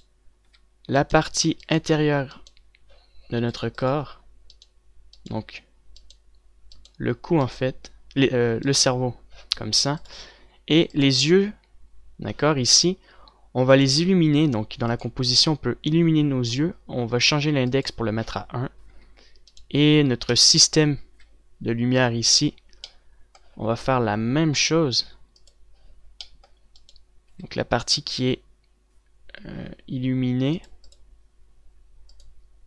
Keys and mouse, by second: 1.4 z, 19.8 a, 21.3 KP_Decimal, 21.7 KP_0, 22.2 z, 23.0 KP_Decimal, 28.2 z, 29.8 z.